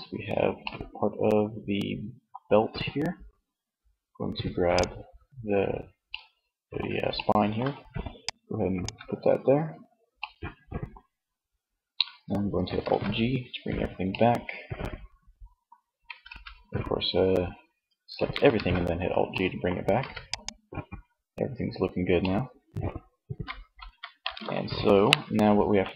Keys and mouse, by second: 0.4 middle click, 5.3 click, 7.4-8.9 drag, 12.0 alt+g, 15.3 a, 15.5 a, 17.7 alt+g, 18.9 ctrl+s.